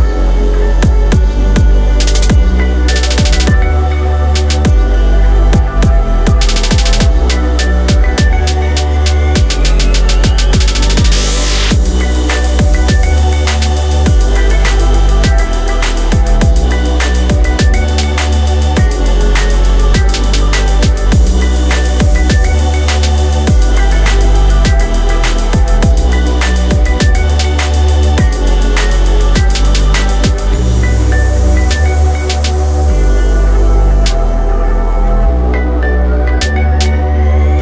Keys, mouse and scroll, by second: 5.4 shift+middle click, 16.5 click, 19.3 click, 22.1 click, 24.7 g, 25.9 click.